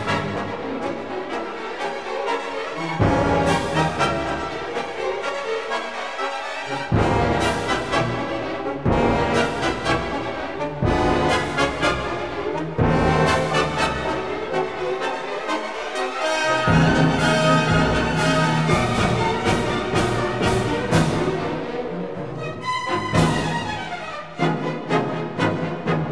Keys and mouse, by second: 0.5 Tab, 1.6 ctrl+r, 3.5 click, 4.6 ctrl+r, 6.3 click, 6.6 Tab, 7.1-8.2 drag, 10.6 click, 11.6 3, 11.9 click, 13.8 shift+s, 15.4 Tab, 16.3 shift+a, 19.7 s, 19.9 KP_Decimal, 20.1 KP_1, 20.5 KP_Enter, 21.4 s, 23.2 click, 25.3 s.